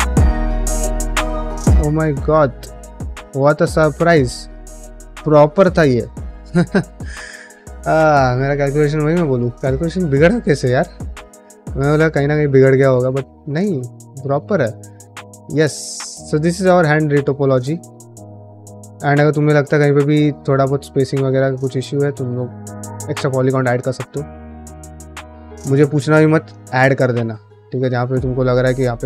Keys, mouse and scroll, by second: 0.0-2.2 typing, 0.0 click, 0.3 click, 0.9 click, 1.2 click, 2.0 click, 2.6 click, 3.1 click, 3.4 f, 3.6 f, 3.9 click, 4.2 middle click, 4.4 f, 4.6 f, 5.0 middle click, 5.9 shift+middle click, 6.2 middle click, 6.8 ctrl+middle click, 7.1 middle click, 7.4 shift+middle click, 8.9 ctrl+Tab, 9.5 shift+middle click, 9.9 middle click, 10.2 f, 10.6-12.4 shift+drag, 12.5 middle click, 12.8 shift+click, 13.9 ctrl+z, 14.3-16.6 shift+drag, 16.7 middle click, 17.0 shift+click, 17.8 middle click, 18.3-20.4 shift+drag, 20.6 middle click, 20.9 middle click, 21.6-23.6 middle drag, 24.0 ctrl+middle click, 24.2 middle click, 25.1 middle click, 25.7 middle click, 26.8 middle click, 27.1 middle click, 27.4 middle click, 27.8 middle click, 28.1 middle click, 28.8 middle click.